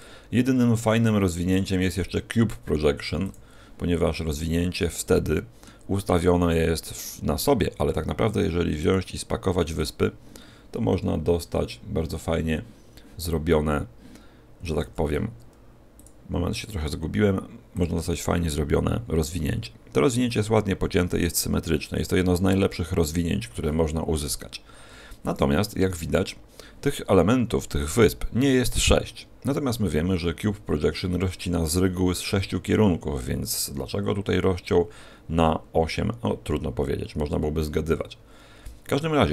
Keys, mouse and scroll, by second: 4.0-5.1 scroll down 4, 5.1 middle click, 8.7 click, 15.9 click.